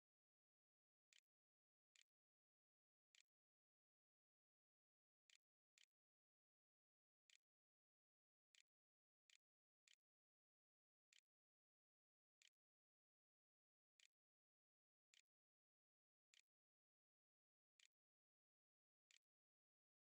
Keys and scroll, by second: 0.0-20.0 typing, 17.6 Tab.